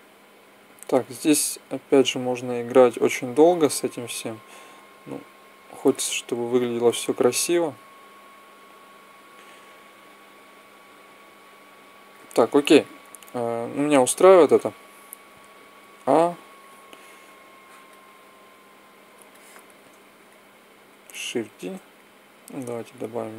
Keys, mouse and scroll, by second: 1.4 click, 2.2-3.4 middle drag, 12.6 click, 14.9 a, 15.2 click, 15.5 a, 19.0-21.0 middle drag, 21.3 shift+d, 22.3-23.3 drag.